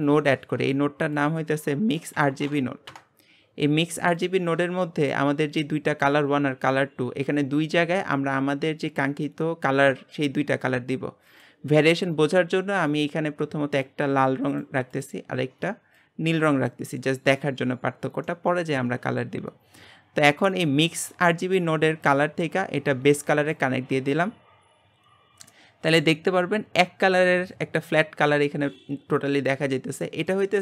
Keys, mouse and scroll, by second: 2.9 shift+a, 12.9 click, 15.9 click, 25.5-30.6 middle drag.